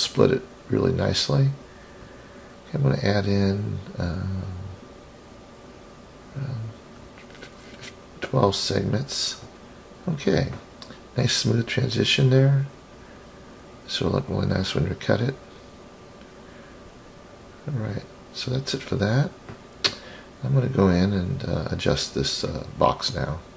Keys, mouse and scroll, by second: 1.2-7.0 drag, 7.4-9.3 middle drag, 9.4-10.6 scroll up 9, 11.4-13.0 drag, 13.2-14.5 scroll down 8, 14.7-15.6 middle drag, 16.9 KP_3, 18.0-19.8 scroll down 6, 19.8 click, 19.8 scroll down 1, 22.8 click.